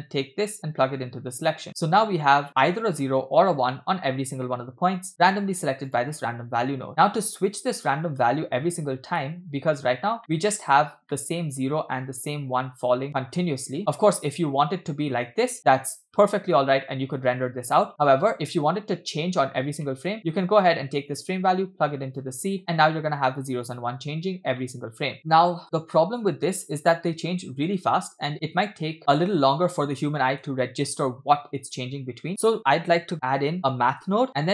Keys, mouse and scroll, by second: 0.2-1.5 drag, 1.9-2.2 scroll down 2, 2.2 scroll up 1, 2.3 scroll down 1, 2.4-3.0 scroll down 1, 4.6 scroll down 1, 4.7 scroll down 1, 5.2 middle click, 5.9 click, 6.9 middle click, 7.5 click, 8.2 space, 9.2 middle click, 9.8 scroll up 2, 10.2 middle click, 11.1 middle click, 11.8-12.7 scroll down 1, 12.7 scroll down 1, 12.8-13.3 scroll up 2, 13.1 shift+middle click, 14.2 scroll down 1, 15.4 space, 15.6 space, 18.2 space, 19.6-19.9 scroll down 2, 19.9 middle click, 21.1-22.3 drag, 22.6 space, 24.6 middle click, 25.2 space, 25.9-26.2 scroll up 2, 25.9 space, 28.3 middle click, 28.3 scroll down 2, 28.6 space, 30.6-31.3 shift+middle drag, 32.3 shift+a.